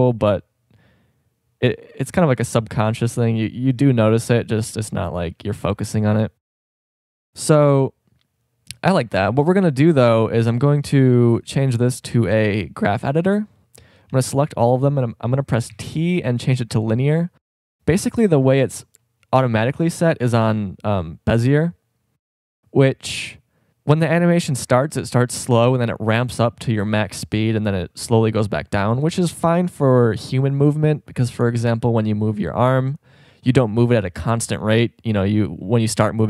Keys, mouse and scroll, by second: 5.1 click, 13.8 a, 14.1 a, 15.7 a, 16.2 t, 19.7 t.